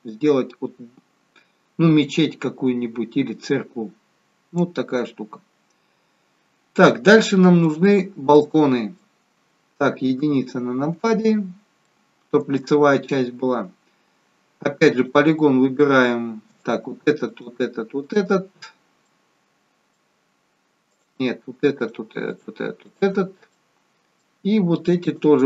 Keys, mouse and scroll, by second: 7.2 middle click, 10.1 KP_1, 11.8 shift+middle click, 13.4-14.1 scroll up 1, 14.9 click, 16.5 click, 17.3 shift+click, 18.0 shift+click, 19.0 middle click, 20.8 click, 21.7 shift+click, 22.3 click, 23.5 middle click, 25.0 shift+click.